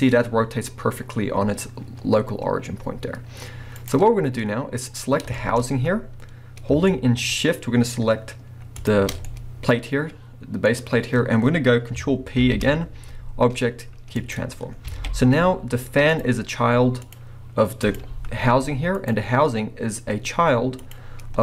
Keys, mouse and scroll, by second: 3.9 right click, 4.0 scroll down 1, 4.9 click, 5.4-8.8 shift+middle drag, 5.6 scroll up 1, 8.8 shift+click, 9.2-12.4 middle drag, 10.7-12.4 scroll up 2, 12.4 ctrl+p, 14.7 scroll down 1, 14.9 alt+a, 16.1 click, 17.0 click, 17.9 click, 18.5 g, 19.1 right click, 20.8 click, 21.2 scroll up 2.